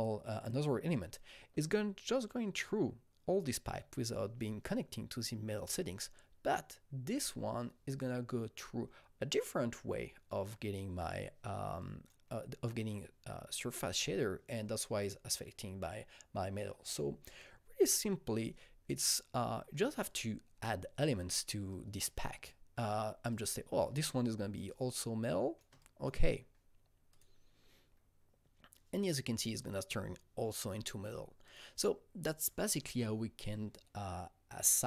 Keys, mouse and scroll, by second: 7.1 click, 11.8 click, 20.0 click, 20.6-23.3 alt+middle drag, 21.7 click, 22.5 click, 23.3 click, 23.8 click, 24.7-27.1 shift+drag, 27.1-30.8 shift+drag, 31.4 click, 32.2 click.